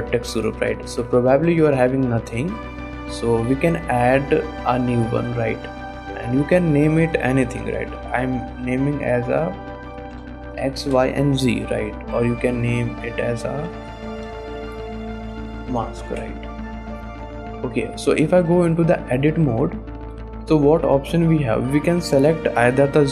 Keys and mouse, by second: 3.6 click, 4.6 click, 6.5-11.0 drag, 8.1 BackSpace, 13.0-16.2 drag, 13.9 BackSpace, 15.3 shift+s, 18.0 click, 18.5 Tab, 19.4-20.6 drag, 21.0 shift+click, 21.5 click, 21.7 click.